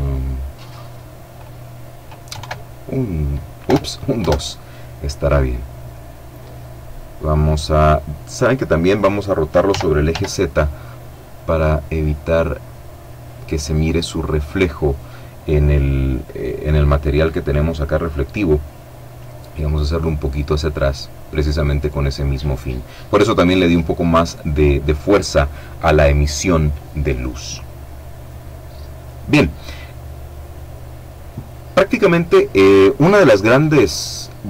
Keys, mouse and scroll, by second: 1.6 KP_2, 1.7 KP_3, 2.9 BackSpace, 8.9 r, 9.3 z, 12.8 click, 18.4 click.